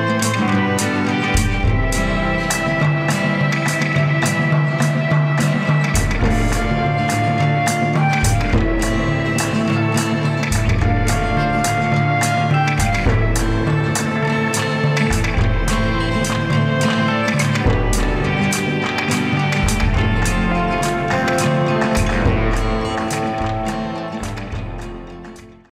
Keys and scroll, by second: 5.6 Right, 5.7 Down, 5.8 Right, 6.3 Down, 6.8 Right, 19.5 ctrl+a.